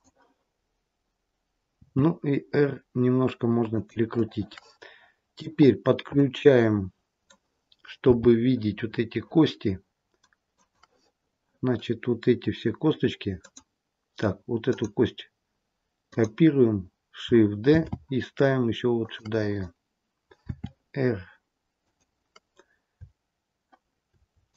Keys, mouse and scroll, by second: 1.7 r, 4.1 middle click, 5.6-7.2 scroll up 3, 6.1 middle click, 8.0 g, 13.3 click, 14.5 click, 17.7 shift+d, 20.4 r, 24.4 shift+click.